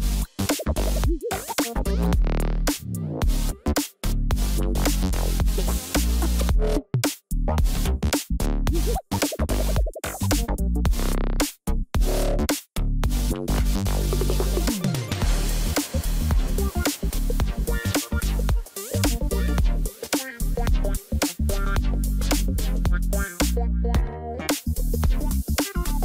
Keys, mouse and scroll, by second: 14.1 alt+click, 16.1 ctrl+z, 20.7 ctrl+t, 21.9 alt+click.